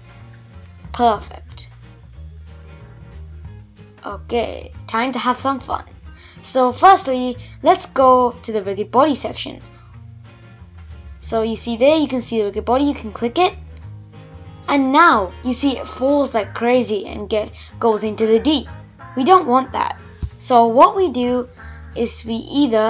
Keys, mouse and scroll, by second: 2.2 click, 3.1 click, 4.8 click, 5.9 click, 10.6-12.7 drag, 12.7 space, 13.1-14.2 scroll down 10, 14.2-16.7 middle drag, 16.7 shift+Left, 17.1 space, 17.9 shift+Left, 18.8-19.7 scroll up 10, 19.9-21.3 middle drag, 21.3-22.7 drag, 22.7-22.8 middle drag.